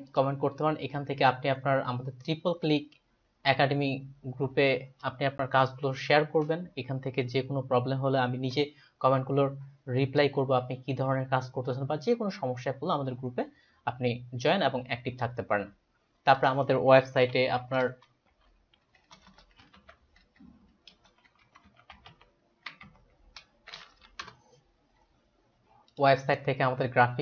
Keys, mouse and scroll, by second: 0.1 click, 17.0-17.9 typing, 19.2-23.4 typing, 24.0 Down, 24.2 Return, 25.9 click.